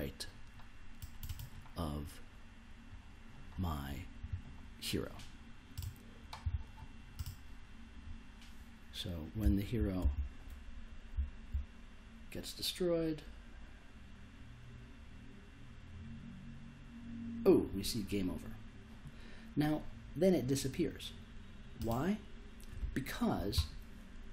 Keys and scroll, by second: 9.4 s.